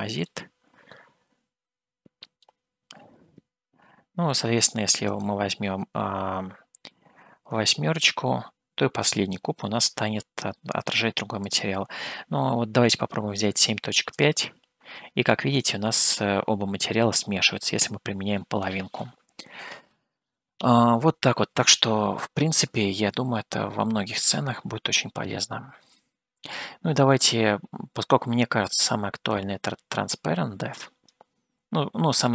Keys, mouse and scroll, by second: 1.1-2.8 middle drag, 5.3-17.2 drag, 25.7-26.3 scroll down 1, 29.5-31.5 drag.